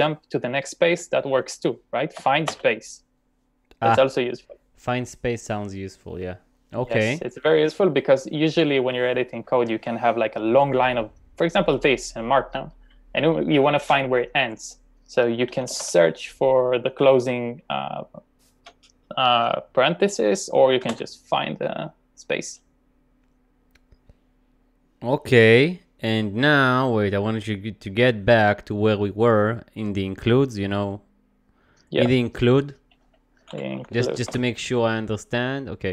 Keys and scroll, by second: 2.2 typing, 10.3 typing, 13.1 typing, 15.3-16.4 typing, 20.9 typing, 32.9-34.1 typing, 34.3 Return.